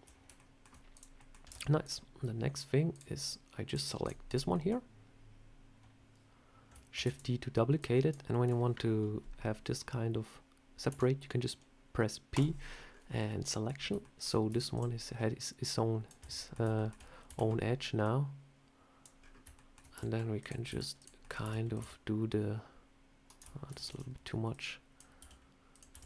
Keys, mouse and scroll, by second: 0.2 middle click, 0.8 click, 1.0 middle click, 1.3 Tab, 1.7 click, 2.8 click, 3.5 click, 3.9 click, 4.1 click, 4.4 middle click, 6.8 shift+d, 7.6 click, 8.2 middle click, 10.7 p, 12.7 scroll up 3, 13.0 middle click, 13.9 shift+middle click, 14.1 shift+scroll down 1, 14.3 Tab, 14.6 click, 15.2 click, 16.0 Tab, 16.2 middle click, 16.6 shift+middle click, 17.1 a, 17.9 click, 19.0-19.5 scroll down 3, 19.4 shift+middle click, 19.8 e, 20.5 s, 21.1 middle click, 21.3 e, 21.6 s, 23.5 ctrl+z, 23.7 ctrl+z, 24.4 click, 25.0 s, 25.8 e.